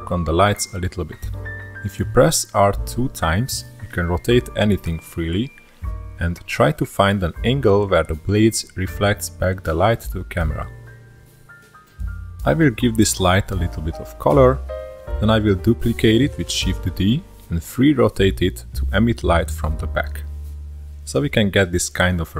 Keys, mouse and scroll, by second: 0.0-1.2 drag, 1.2-2.0 scroll down 1, 2.0-3.2 middle drag, 3.2 click, 3.8-4.3 middle drag, 4.3-5.1 scroll up 1, 5.1 r, 11.6 click, 18.1 shift+d, 18.7 r, 21.4 r.